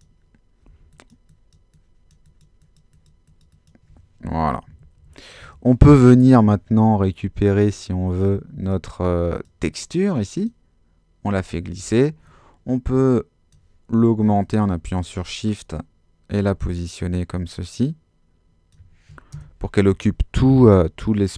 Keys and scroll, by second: 0.7 x, 4.5 super+-.